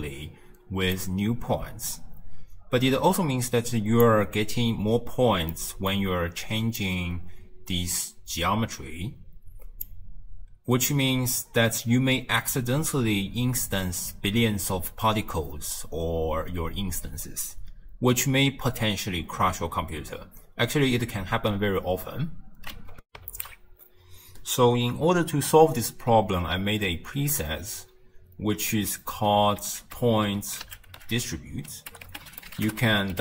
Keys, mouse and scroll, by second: 1.7-4.8 drag, 4.8-5.6 scroll down 3, 5.6-7.5 middle drag, 7.5-23.1 drag, 23.2 ctrl+alt+shift+q, 29.8 ctrl+a.